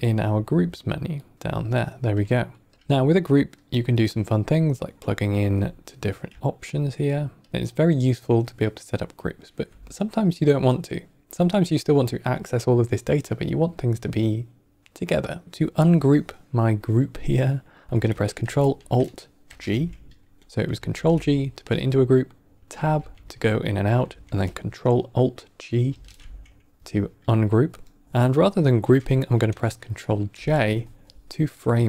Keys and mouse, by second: 2.6 click, 3.7 Tab, 3.7-4.9 drag, 6.2 Tab, 6.6 click, 7.0 click, 15.4 Tab, 15.4-16.6 drag, 19.3 ctrl+alt+g, 20.8 ctrl+g, 21.6 Tab, 22.7 Tab, 23.0 Tab, 25.8 ctrl+alt+g, 28.0 middle click, 30.2 ctrl+j.